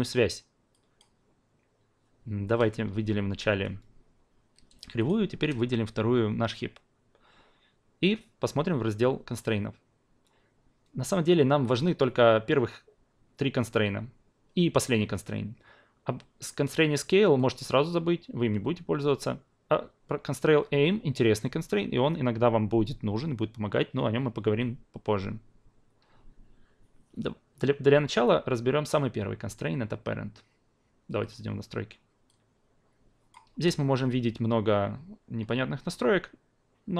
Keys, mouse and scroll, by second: 3.5 q, 5.0 shift+click, 31.2-36.9 drag.